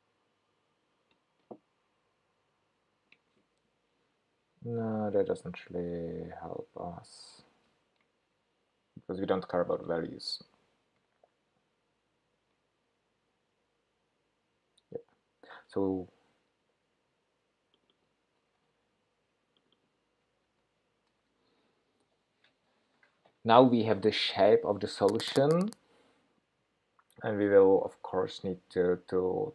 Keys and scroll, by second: 9.6 super+BackSpace, 18.6 super+c, 20.5 super+v.